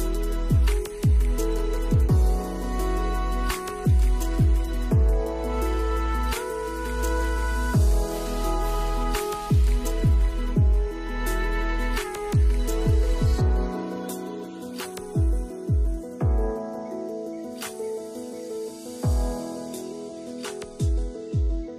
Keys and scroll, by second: 1.2 space, 4.1 space, 7.4 space, 9.0 space, 14.1 space, 17.4 space.